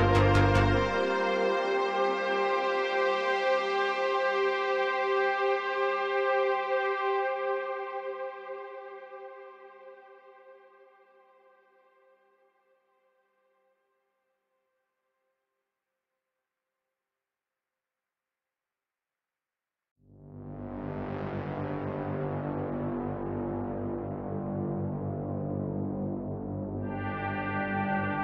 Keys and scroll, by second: 2.1 s, 4.2 ctrl+z, 4.8 s, 11.8 space, 15.5 i, 18.3-19.6 typing, 21.0 z, 21.1 z, 24.6 a, 25.3 KP_Decimal.